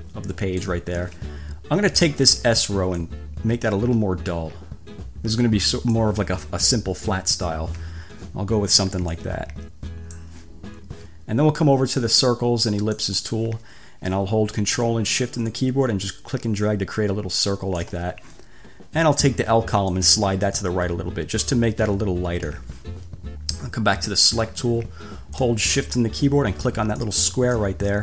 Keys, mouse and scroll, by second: 3.2-6.3 drag, 9.3 click, 13.2 click, 15.6-18.2 ctrl+shift+drag, 20.2-23.0 drag, 24.3 click, 27.2 shift+click.